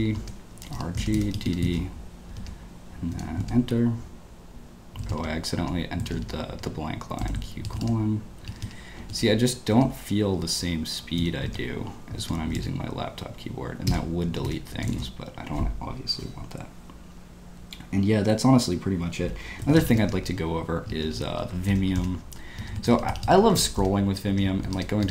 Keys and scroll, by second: 0.0-3.1 typing, 2.4 Escape, 3.4 Return, 5.0 shift+;, 5.6 Escape, 6.5 Escape, 7.2-9.0 typing, 9.7 Escape, 11.1 i, 11.5 Return, 12.2 Escape, 12.4 space, 12.5 w, 13.6-15.4 typing, 20.6-25.1 typing.